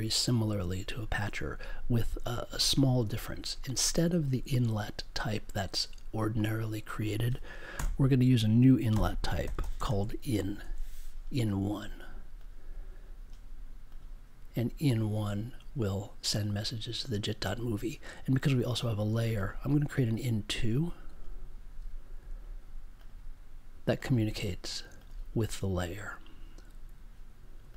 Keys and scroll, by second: 7.7 BackSpace, 8.9-10.5 typing, 22.1 2.